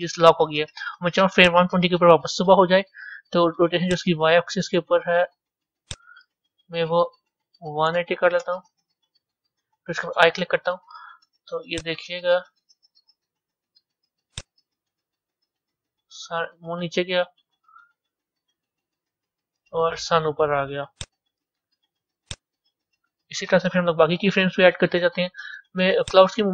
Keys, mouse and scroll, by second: 1.4 click, 3.9-8.9 drag, 11.7-17.4 drag, 21.0 drag, 22.3-26.5 drag.